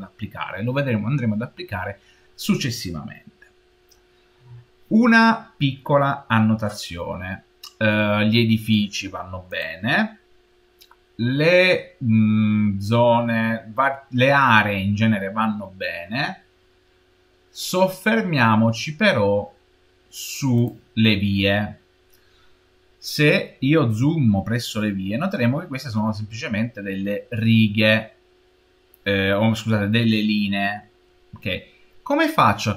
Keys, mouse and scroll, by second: 9.3 click, 20.4 click, 23.7-24.7 scroll up 4, 24.7 scroll up 6, 24.9 middle click, 25.7 middle click, 25.9-27.3 middle drag.